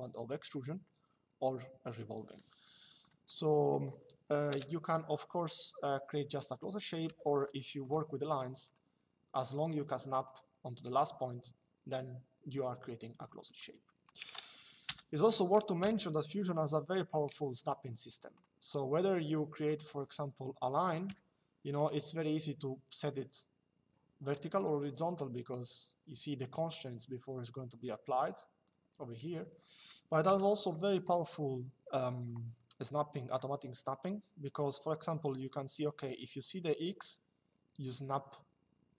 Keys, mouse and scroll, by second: 2.8 click, 4.2 Delete, 9.9 click, 12.8 Escape, 13.3 click, 14.6 Delete, 15.5 l, 18.1 click, 19.4 click, 19.6 Escape, 29.1 Escape, 29.6 middle click, 30.0 click.